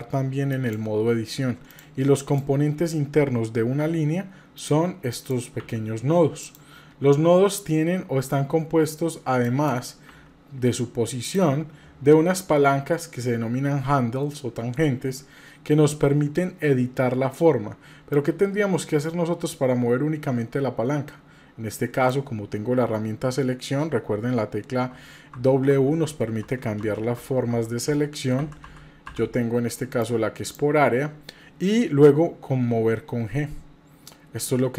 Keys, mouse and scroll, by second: 1.7 click, 2.2 click, 3.8 g, 5.1 click, 5.6 g, 9.4 drag, 10.1 g, 18.2-22.1 drag, 24.9-28.6 typing, 30.0 click, 32.8 g.